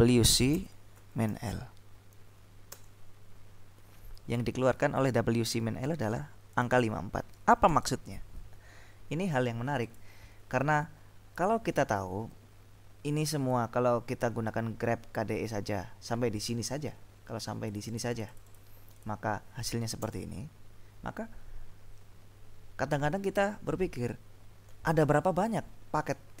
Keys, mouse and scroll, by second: 0.0-1.5 typing, 2.9 Return, 6.6 click, 7.8 click, 9.9 click, 12.3 Up, 17.7-19.1 drag, 20.2 Return, 25.6-26.4 scroll up 2.